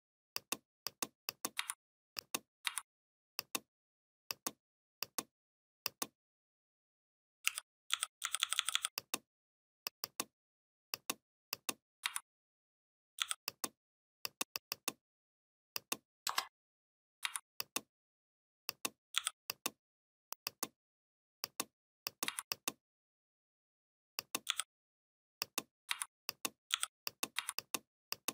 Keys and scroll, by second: 1.4 v, 7.3 u, 7.7 i, 11.9 v, 13.0 i, 16.1 Return, 17.1 v, 19.0 i, 22.1 v, 24.3 i, 25.7 v, 26.5 i, 27.2 v, 28.2 i.